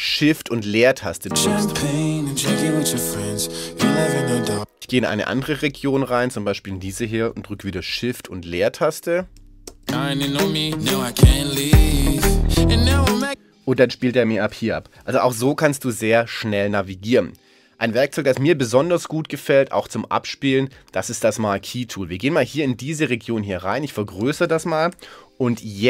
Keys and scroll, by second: 1.1 shift+space, 4.4 space, 9.7 shift+space, 13.1 space.